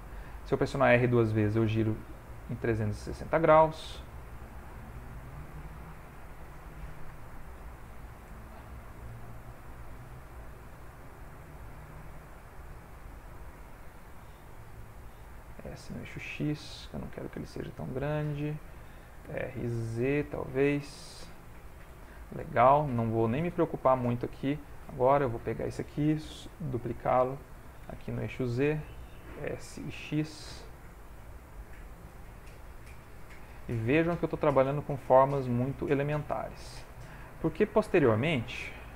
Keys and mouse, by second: 0.2 r, 4.2 click, 6.3 click, 7.2 shift+middle click, 8.2 shift+middle click, 8.4 ctrl+middle click, 9.0 s, 10.0 g, 11.6 s, 13.0 g, 13.4 middle click, 14.7 s, 17.0 middle click, 18.4 middle click, 19.2 r, 21.6 middle click, 24.3 middle click, 25.3 click, 27.5 shift+d, 29.3 s, 31.4 middle click, 33.2 click, 33.7 shift+middle click, 34.2 r, 34.9 g, 36.6 shift+middle click, 37.0 middle click, 38.4 s.